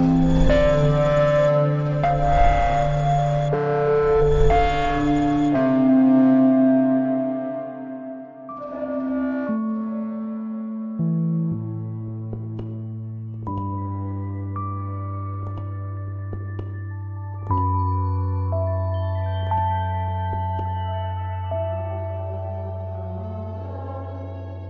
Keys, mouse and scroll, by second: 6.5 ctrl+scroll down 1, 6.9 click, 7.4 ctrl+scroll down 1, 8.0 z, 8.4 click, 9.1 ctrl+scroll up 1, 9.5 v, 9.7 click, 13.3-24.6 drag.